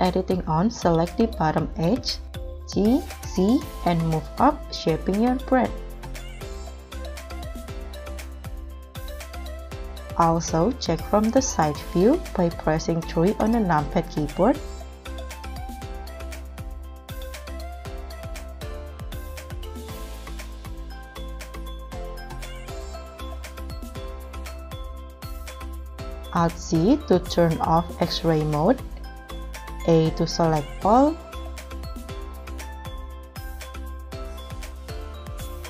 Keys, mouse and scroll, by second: 2.7 g, 3.1 z, 3.6 scroll up 2, 10.3 KP_3, 14.7 scroll up 2, 15.3 g, 16.0 z, 17.0 KP_1, 17.5 KP_3, 18.6 g, 18.9 scroll down 3, 19.5 z, 20.6 KP_1, 21.1 g, 21.2 z, 22.0 Escape, 22.7 z, 23.3 scroll up 2, 23.8 scroll down 1, 24.1-24.6 scroll up 4, 24.6 middle click, 25.3 scroll down 1, 25.4 scroll up 2, 25.6-26.2 scroll down 1, 26.4 alt+z, 27.3-27.9 scroll down 2, 27.9 scroll up 1, 28.2 middle click, 30.3 m, 30.4 a, 31.9 right click.